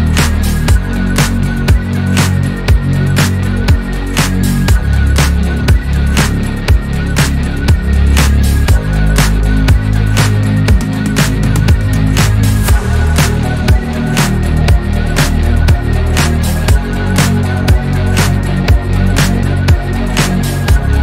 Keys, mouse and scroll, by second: 1.4-2.5 scroll up 1, 2.5-3.8 middle drag, 3.8 ctrl+r, 6.3-7.3 middle drag, 7.3 scroll up 2, 7.5-8.6 middle drag, 8.6 ctrl+r, 9.8-10.3 scroll down 1, 10.3 Tab, 10.5-11.1 middle drag, 11.1 click, 11.4 scroll down 1, 11.7-12.1 middle drag, 12.1-13.7 scroll up 4, 13.7-14.8 middle drag, 14.8 ctrl+r, 15.4 click, 15.8 Tab, 16.6 ctrl+r, 17.9-19.5 middle drag, 19.5 ctrl+r, 20.4 Tab, 20.8-21.0 right drag.